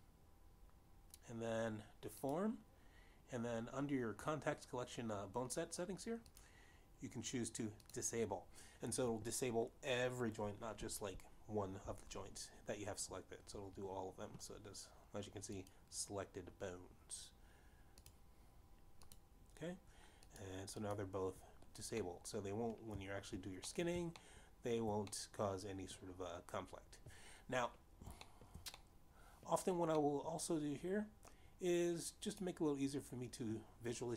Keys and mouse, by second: 3.4 click, 7.5 click, 8.9 click, 17.5 click, 19.1 click, 20.3 click, 21.5 click, 21.9 click, 23.2 middle click, 25.0 middle click, 25.4 shift+middle click, 26.3 middle click, 29.4 shift+middle click, 30.0 middle click, 31.2 middle click, 33.5 click.